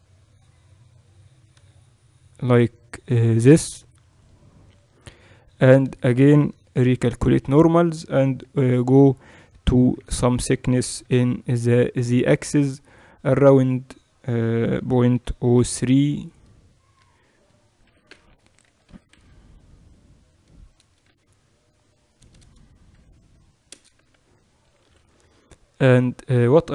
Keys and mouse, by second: 4.0-6.7 drag, 5.5 a, 5.7 a, 6.7 ctrl+n, 7.3 Tab, 8.3 KP_1, 9.7 Tab, 9.9 a, 10.2 a, 10.9 e, 17.7 g, 23.9 a, 24.1 a, 24.7 ctrl+n, 25.3 Tab.